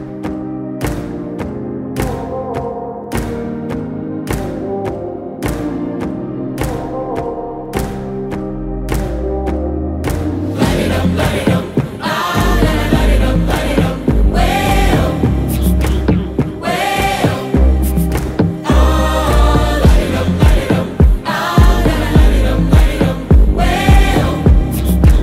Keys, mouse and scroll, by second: 0.0-0.4 typing, 1.8-4.2 drag, 15.0 middle click, 16.4-17.9 scroll down 1, 17.9-18.8 click, 18.9 middle click, 20.2-21.2 drag.